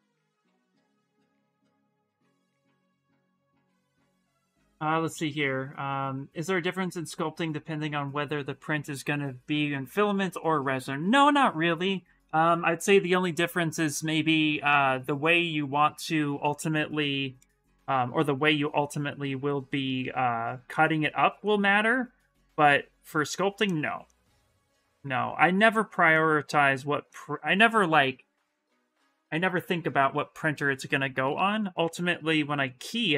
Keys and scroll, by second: 18.0 s, 19.3 s, 31.8 s.